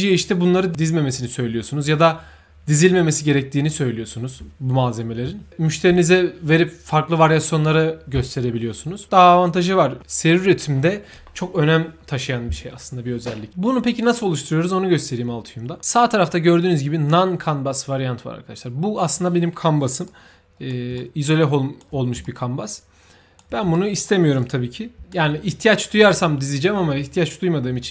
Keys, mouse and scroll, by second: 16.6 click, 20.0-20.6 right drag, 20.9-21.7 shift+right drag, 22.2-23.3 right drag, 23.7-24.0 right drag, 24.4-25.5 typing, 25.0 right click.